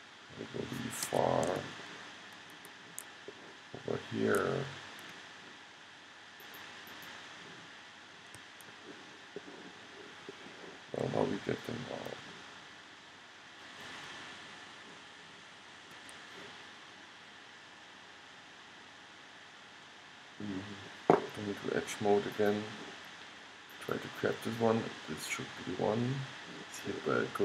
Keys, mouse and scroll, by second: 0.9 middle click, 1.7 middle click, 2.1 middle click, 3.8 middle click, 4.2 middle click, 4.4-5.7 middle drag, 6.6-8.5 middle drag, 8.5 click, 8.8-11.9 middle drag, 12.2 g, 17.3-22.1 middle drag, 22.6-23.9 drag.